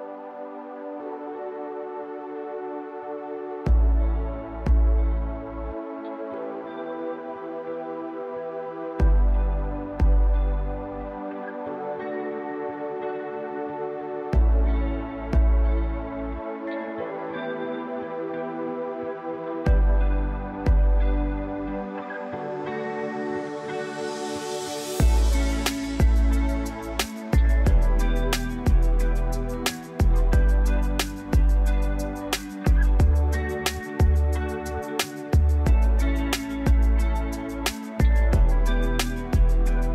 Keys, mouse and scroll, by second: 12.0 s, 15.8 m, 17.2 m, 32.4 3.